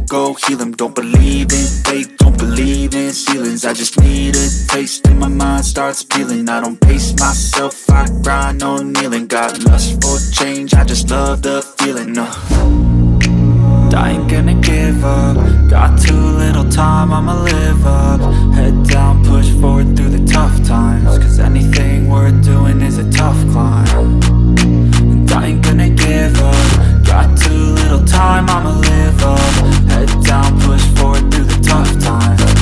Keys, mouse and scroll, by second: 1.1 click, 2.0 click, 4.0 click, 5.3 i, 5.9 click, 6.3 v, 7.1 click, 12.0 Up, 13.9 Return, 15.2-18.0 drag, 27.1 Tab, 28.3 typing, 28.4 shift+Tab, 29.2 shift+Tab, 32.0 shift+Tab.